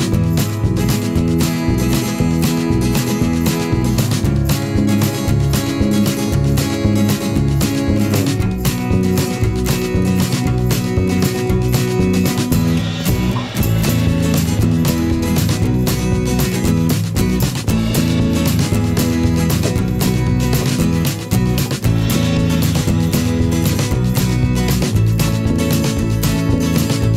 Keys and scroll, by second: 21.6 ctrl+-.